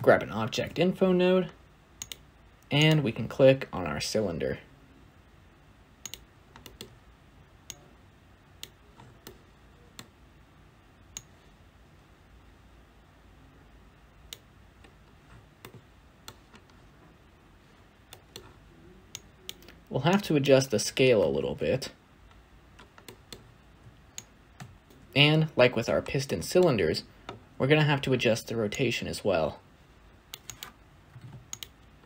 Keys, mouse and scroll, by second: 6.0 click, 8.5 click, 16.6-17.1 scroll down 1, 17.1-17.8 scroll up 2, 20.4-22.9 alt+drag, 28.8-31.5 drag.